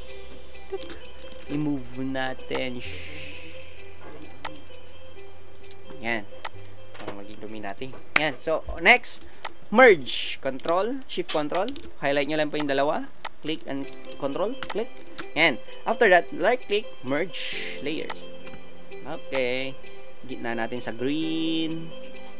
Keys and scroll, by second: 1.4 alt+shift+Return.